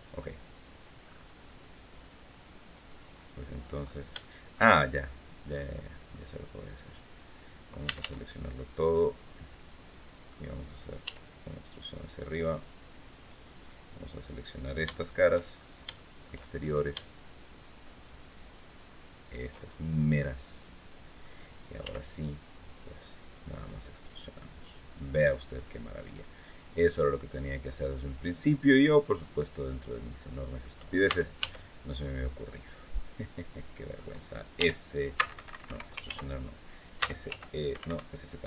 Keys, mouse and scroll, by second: 0.0 scroll down 1, 0.8-1.3 scroll up 1, 2.9 middle click, 3.9 shift+middle click, 4.7-6.0 shift+middle drag, 7.6 a, 8.7-10.2 middle drag, 10.8 e, 12.4 click, 13.4 click, 14.3 right click, 14.7 shift+middle click, 15.3-15.6 shift+scroll up 1, 15.7 shift+middle click, 16.3-16.6 shift+scroll up 2, 17.7 shift+right click, 18.8 shift+right click, 19.3 shift+scroll down 1, 19.8-21.1 middle drag, 21.6 e, 24.7 click, 25.0 scroll down 2, 25.4-26.8 middle drag, 27.0-29.5 middle drag, 29.7 scroll down 2, 30.0 click, 30.8 a, 31.8-33.9 drag, 34.3 e, 35.1 Escape, 35.8 ctrl+z, 36.7 s, 37.0 z, 37.5 Escape.